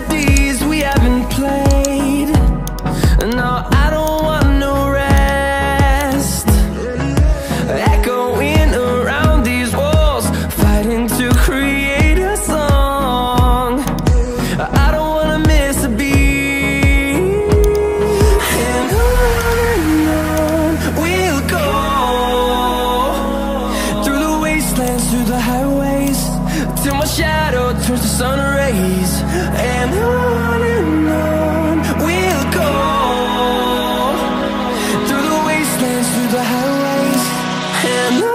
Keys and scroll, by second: 14.8 p, 16.4 0, 19.8 0.